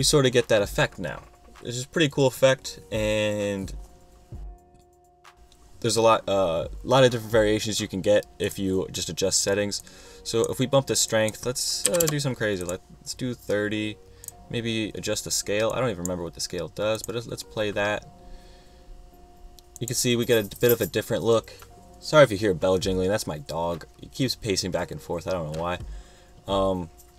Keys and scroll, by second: 11.7-12.6 typing.